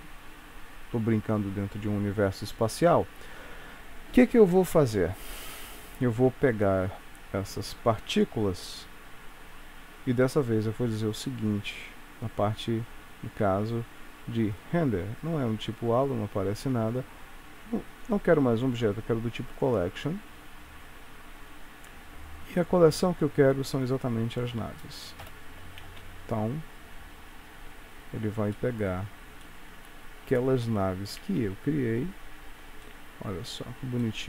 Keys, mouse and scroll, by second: 0.0 scroll down 1, 0.1 scroll down 1, 5.0 click, 8.6-9.5 scroll down 3, 9.5 scroll down 1, 11.7-13.6 scroll down 6, 14.6 click, 14.6-15.3 scroll down 7, 15.3 click, 21.8-22.9 scroll down 3, 22.9 click, 25.3 shift+Left, 25.9 space, 27.9 Escape, 28.6 middle click, 29.5 shift+middle click, 30.1-30.8 scroll up 4, 30.9-31.4 scroll down 1, 31.4 space, 32.9 middle click, 34.1 shift+middle click.